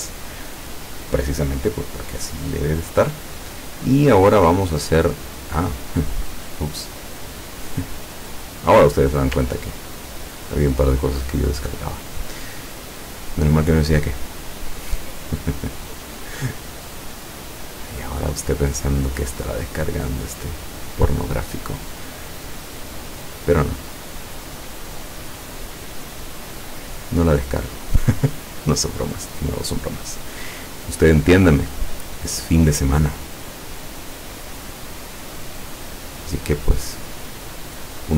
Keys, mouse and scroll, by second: 6.5 click, 9.8-10.3 ctrl+scroll up 4, 13.4 click, 15.7-19.7 drag, 20.2 click, 21.7 click, 23.4 click, 25.4-31.2 drag, 31.7 click, 33.5-36.6 drag, 37.5 click.